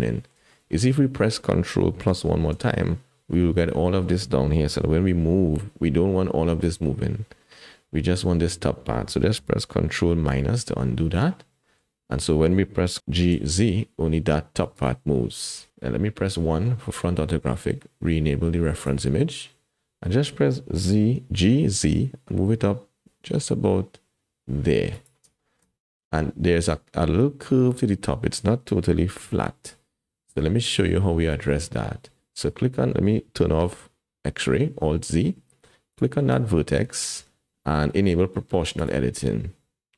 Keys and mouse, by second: 0.6 shift+middle click, 2.4 ctrl+KP_Add, 5.1 g, 10.3 ctrl+KP_Subtract, 11.3 click, 13.0 g, 16.5 KP_1, 18.8 click, 20.9 g, 25.4 shift+click, 25.9 click, 29.5 click, 35.0 alt+z, 36.6 shift+click, 38.7 click.